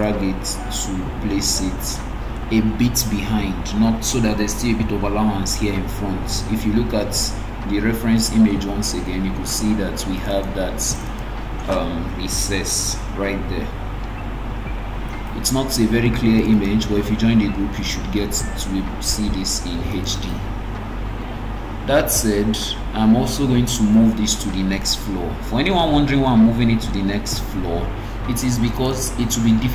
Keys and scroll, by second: 27.3 ctrl+x.